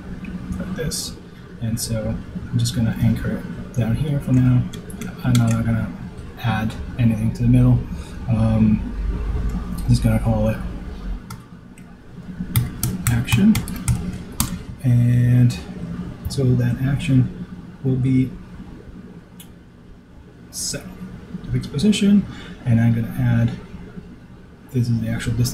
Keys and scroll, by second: 13.7 super+g, 14.9 super+r, 15.2 super+a.